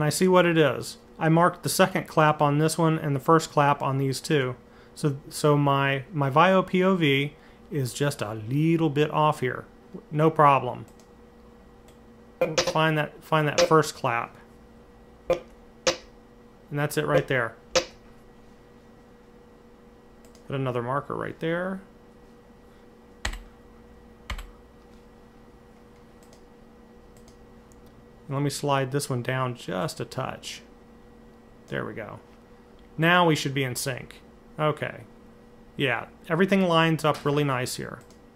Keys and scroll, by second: 15.0 Right, 15.6 Right, 16.9 Left, 17.5 Right, 23.0 m, 24.1 m.